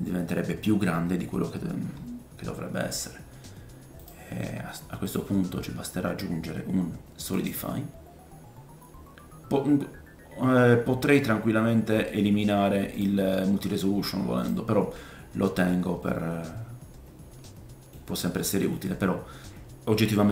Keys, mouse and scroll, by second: 4.1 click, 8.4-9.8 scroll down 4, 9.8-10.5 scroll up 1, 13.0-14.4 drag, 16.0 middle click, 18.3 middle click.